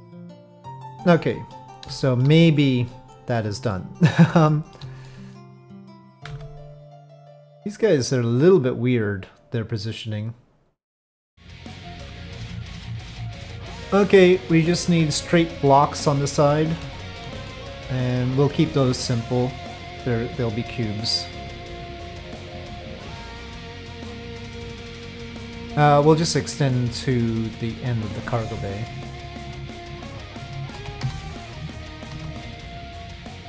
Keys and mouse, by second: 0.0 click, 1.3 middle click, 2.0 shift+middle click, 2.9 middle click, 3.7 middle click, 4.5 shift+click, 5.0 middle click, 5.7 click, 6.3 Tab, 7.2-14.6 middle drag, 15.2-16.0 middle drag, 16.3 middle drag, 16.9 shift+middle drag, 17.4-18.1 middle drag, 19.6-23.1 drag, 23.1 middle click, 24.1 middle click, 25.3 middle click, 26.4-28.0 drag, 28.3 middle click, 30.7 z, 32.1 2, 32.2 shift+click, 32.5 shift+click, 33.0 middle click.